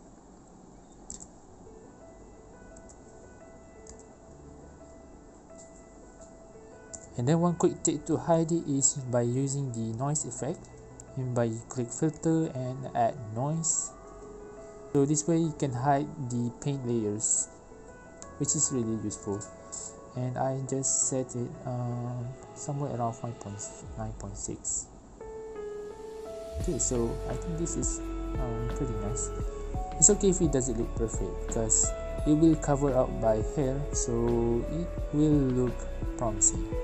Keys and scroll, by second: 0.3 ctrl+alt+e, 4.0 i, 4.3 b, 4.9 i, 5.1 b, 6.9 ctrl+j, 31.3 ctrl+alt+e.